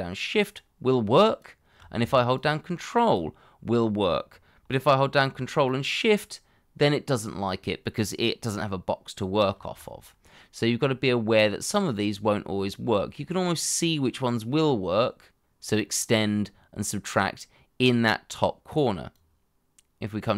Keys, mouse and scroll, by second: 2.3 ctrl+click, 5.6 ctrl+shift+click.